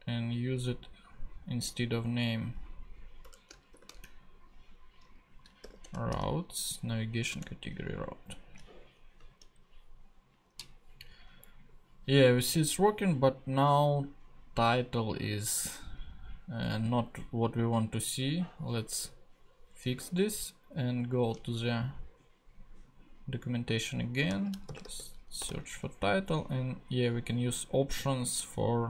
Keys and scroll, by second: 3.2 BackSpace, 3.7 shift+[, 4.9-6.1 typing, 7.3 Return, 9.2 super+Tab, 20.0 super+Tab, 24.3 super+f, 24.6 super+t, 24.7-25.4 typing.